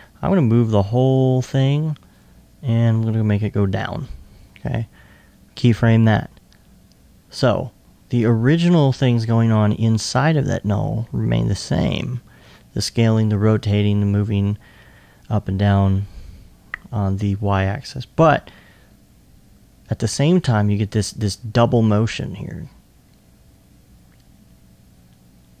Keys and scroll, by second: 2.9 e.